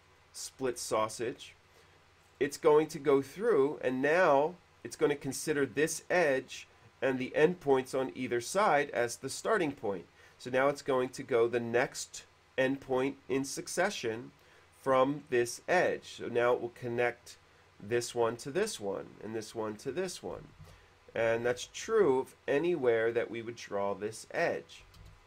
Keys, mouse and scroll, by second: 0.3 click, 0.6 space, 1.2 middle click, 1.4 scroll up 1, 2.3-2.8 scroll up 1, 20.3 middle click, 20.9 ctrl+z, 21.8 ctrl+z, 22.1 q, 23.4 click, 25.0 click.